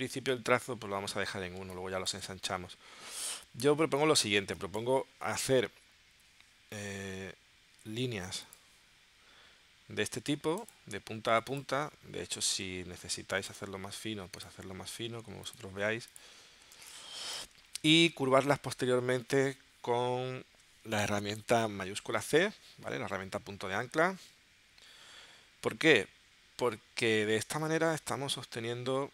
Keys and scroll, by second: 1.6 space, 4.4 space, 6.1 p, 6.6 p, 12.6 v, 16.7 space, 22.2 shift+c.